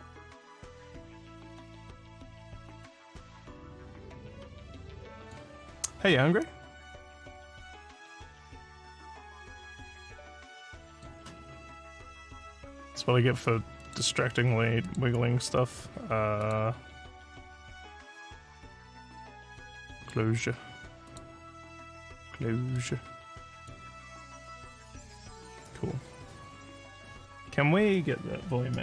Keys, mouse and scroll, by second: 5.2 click, 9.1-28.8 drag.